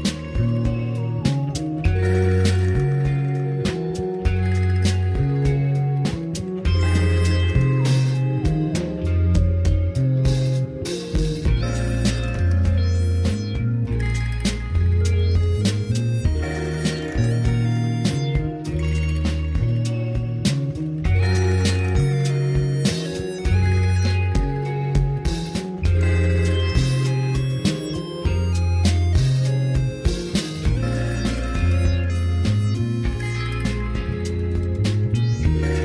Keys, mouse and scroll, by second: 0.1-1.9 drag, 3.2 click, 3.7 scroll up 1, 8.8 n, 10.0-12.7 drag, 11.2 KP_Enter, 12.3 space, 14.8 Return, 16.5 click, 17.3 click, 18.3-19.8 scroll down 3, 19.8 space, 23.1 Down, 26.0 g, 27.4 click, 27.7 shift+middle click, 29.2 g, 31.3 click, 32.3 r, 33.6 click, 35.6-35.8 drag.